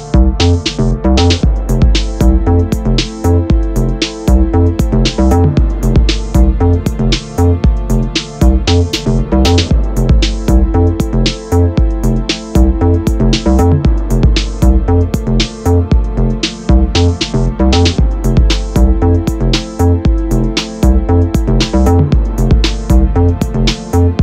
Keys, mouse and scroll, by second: 0.7 click, 7.7 click, 8.0 g, 10.4 click, 11.0 z, 13.2 shift+right click, 13.6 shift+a, 15.2 click, 16.2-18.9 drag, 16.8 KP_Enter, 17.2 z, 19.0 drag, 19.0 z, 19.2-22.8 middle drag, 19.8-20.5 scroll down 2, 21.1 x, 22.8 shift+right click, 22.9-24.2 middle drag, 23.5 ctrl+s.